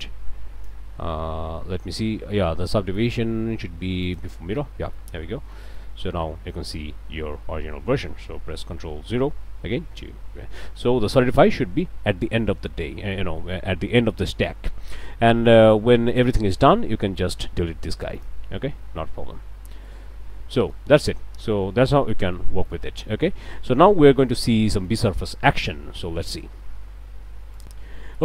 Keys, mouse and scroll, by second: 0.0 click, 4.0 click, 4.8 middle click, 5.3 Tab, 5.5 middle click, 9.6 ctrl+0, 14.5 click, 16.1 click, 18.2 click, 19.7 ctrl+z, 20.3 ctrl+middle click, 20.9 Tab, 21.2-22.6 middle drag, 22.6 scroll up 1, 23.5-25.1 middle drag, 25.2 scroll down 1, 25.5 click, 27.6 click.